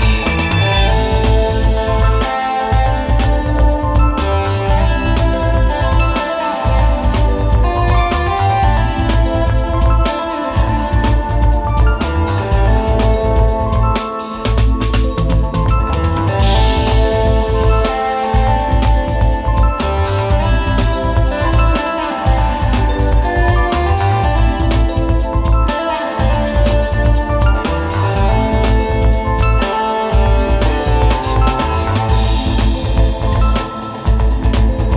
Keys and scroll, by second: 0.7 space, 1.2 space, 1.7 space, 2.8 space, 3.2 space, 5.0 super+z, 5.3 super+", 7.8 super+], 12.7 super+[, 13.4 space, 14.7 space, 15.4 space, 16.9 space, 17.4 space, 20.1-22.7 typing, 20.5 super+", 24.6 super+[, 24.9 space, 31.5 space, 32.0 space, 33.8 space.